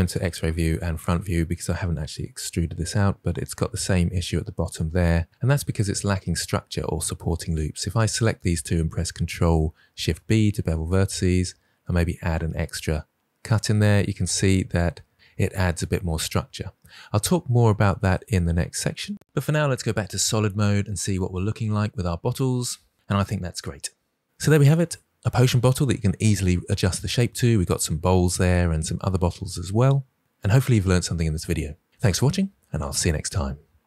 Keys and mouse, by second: 0.1 alt+z, 0.9 click, 1.7 e, 4.5 click, 7.4 click, 9.9 ctrl+b, 19.1 alt+z.